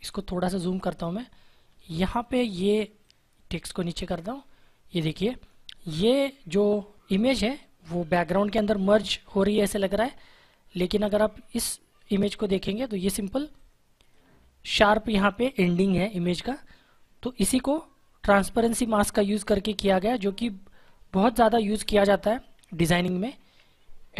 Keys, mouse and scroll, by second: 0.2 ctrl+=, 1.5 space, 1.7 click, 2.0 space, 2.9 click, 10.1 space, 11.5 click, 13.1 space, 13.5 click, 13.6 space, 20.3 ctrl+Num_Lock, 20.7 ctrl+z.